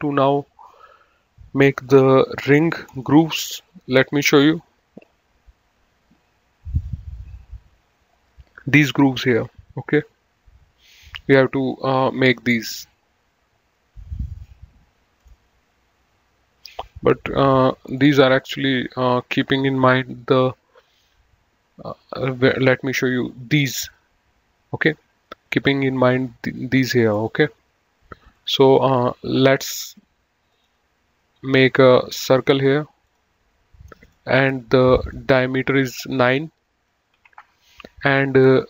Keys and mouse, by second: 5.3 click, 22.4 click, 26.3 click, 28.6 click, 30.7 click, 32.3 click, 37.5 KP_9, 37.7 KP_Enter.